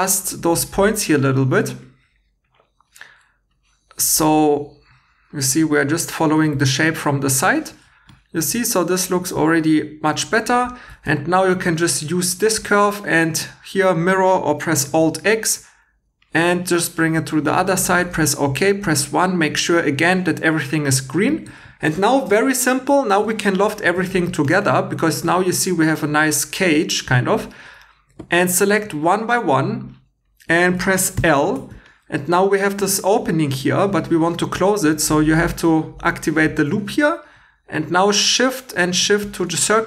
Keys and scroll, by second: 6.4 2, 11.1 2, 14.9 alt+x, 18.0 1, 21.5 2, 31.2 l.